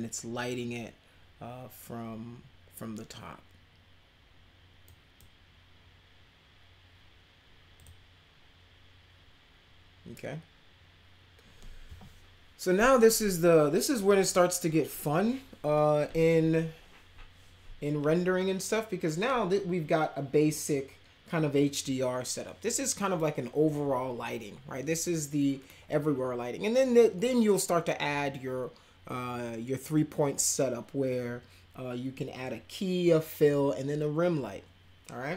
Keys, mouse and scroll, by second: 4.8-5.2 right drag, 7.7 click.